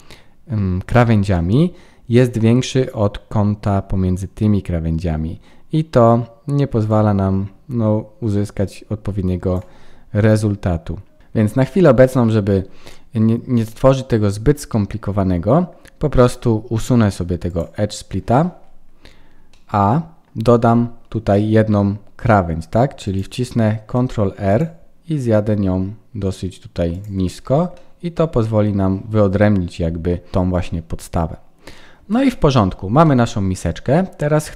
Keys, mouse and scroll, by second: 1.3 middle click, 6.8 click, 9.8-10.1 scroll down 4, 10.1 middle click, 11.5 shift+middle click, 12.1-13.1 scroll down 4, 13.3-13.6 scroll up 3, 13.6 middle click, 16.2 middle click, 17.4 click, 18.6-19.1 scroll down 3, 19.1-19.5 scroll up 2, 19.4 middle click, 20.7 Tab, 21.3 middle click, 23.0 click, 23.9 ctrl+r, 27.1 Tab, 27.7 middle click, 30.3 scroll down 4, 30.6 middle click, 32.1 ctrl+s, 32.6-33.0 scroll up 3, 33.0 middle click, 34.1-34.5 scroll down 4.